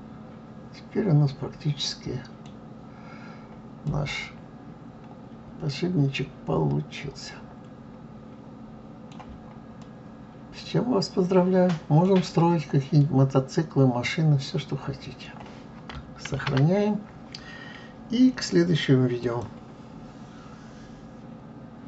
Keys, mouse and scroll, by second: 2.5 scroll down 2, 3.3-3.6 scroll up 2, 3.8-6.9 middle drag, 9.3 scroll down 2, 9.8-12.8 middle drag, 13.0-16.0 middle drag, 16.4 ctrl+s.